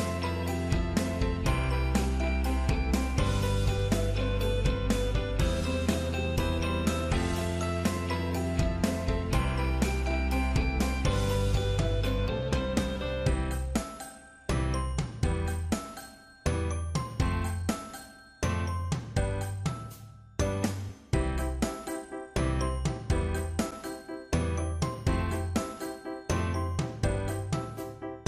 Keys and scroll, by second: 24.7 ctrl+c, 26.0 ctrl+f.